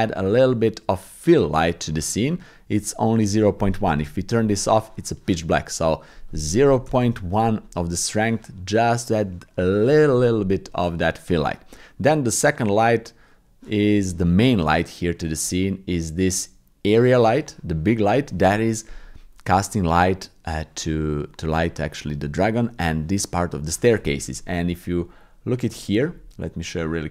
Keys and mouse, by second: 3.3 click, 6.0-7.1 drag, 16.9 click, 25.1 middle click, 25.9 shift+middle click, 26.9 shift+middle click.